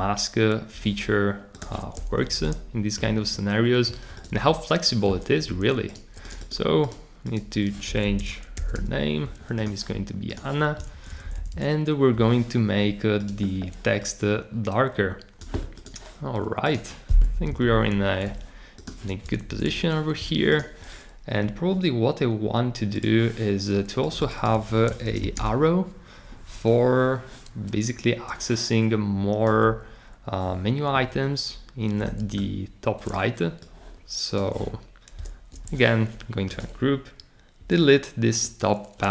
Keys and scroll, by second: 2.1 Left, 2.3 Left, 3.1 Right, 7.6-9.2 typing, 10.9 Left, 11.2 Left, 11.3 Left, 11.5 Left, 13.7-14.6 typing, 17.3 Right, 17.6 Right, 19.4 Left, 19.6 Left, 24.3-25.7 typing, 35.1 shift+super+g, 37.6 BackSpace.